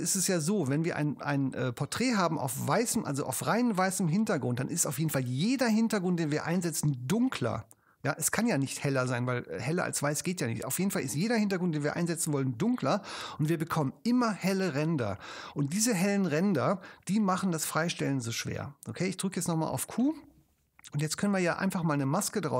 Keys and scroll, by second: 19.4 q.